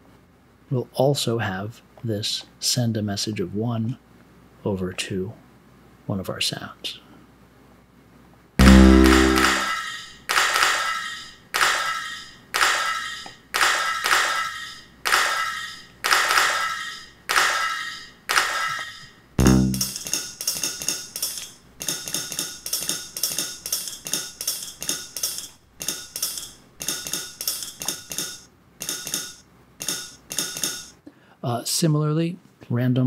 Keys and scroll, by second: 18.2 2.